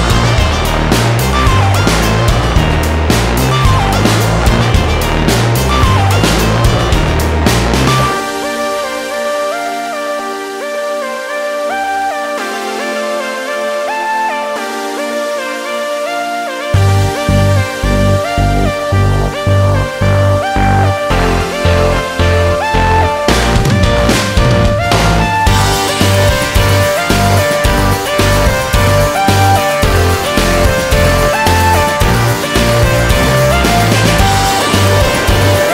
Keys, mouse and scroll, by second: 4.4 click, 5.8 click, 7.1 click, 7.4 ctrl+z, 9.0 alt+click, 13.4 click, 13.9 F3, 14.4 middle click, 15.2 scroll up 1, 16.2 scroll up 1, 17.7 scroll up 1, 19.2 click, 21.6 click, 23.5 click, 24.2 click, 26.0 click, 26.8 click, 27.4 alt+click, 29.7 click, 30.0 ctrl+z, 31.7 click, 32.6 click, 33.5 click, 34.7 click, 35.5 middle click.